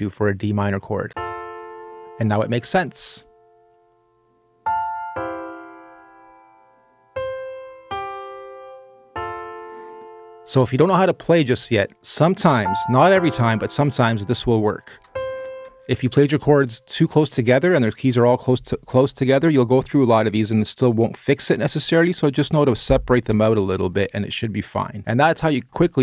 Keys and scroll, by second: 0.8 space, 15.4 space.